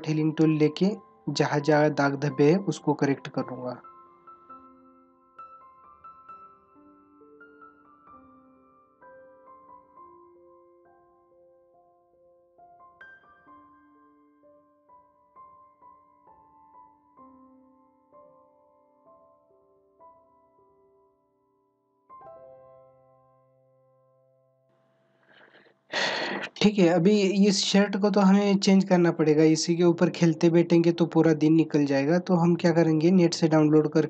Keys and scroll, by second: 7.9 space, 12.0 space, 16.1 space, 16.9 space, 17.2 ctrl+=, 17.4 space, 18.5 ctrl+=, 18.8 space, 19.1 ctrl+=, 21.1 ctrl+-, 21.2 space, 21.4 ctrl+-, 21.7 space, 22.4 ], 22.8 ], 24.1 ctrl+=, 24.4 space, 24.6 ctrl+=.